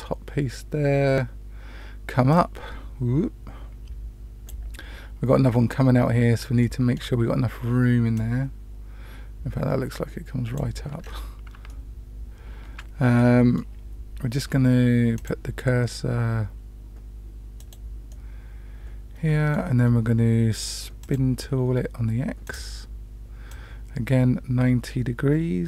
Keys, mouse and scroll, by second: 2.3-4.4 drag, 6.6 shift+middle click, 8.1-10.6 drag, 11.0 scroll down 1, 11.6-12.7 shift+middle drag, 13.1 middle click, 15.1 click, 17.6 click, 18.1-19.6 middle drag, 21.0 click, 22.4 click, 23.5-25.6 drag.